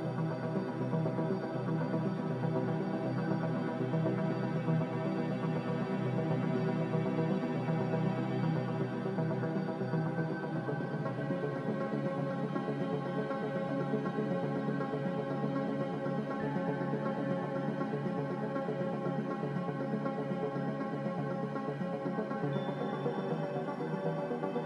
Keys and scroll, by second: 7.1 z, 7.1 2, 9.4 2, 13.5 2, 17.2 2, 18.8 2, 21.8 2, 23.4 2.